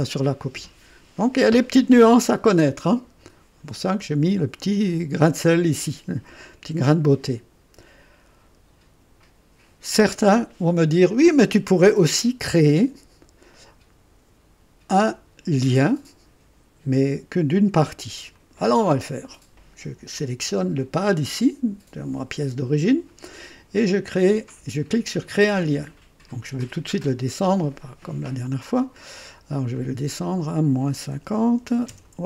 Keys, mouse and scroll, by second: 18.3 click, 25.2 click, 27.1 click, 29.7 click, 31.1 KP_Subtract, 31.5 KP_5, 31.8 KP_0.